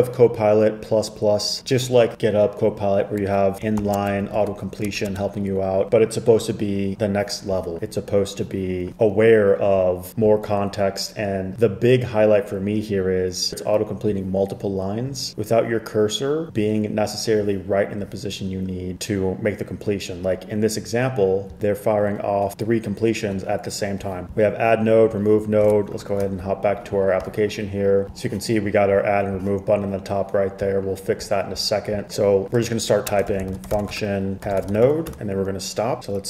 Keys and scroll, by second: 3.9 shift+3, 5.0 BackSpace, 5.2 BackSpace, 26.1 shift+super+[, 33.2-36.0 typing, 36.0 Escape, 36.0 Tab.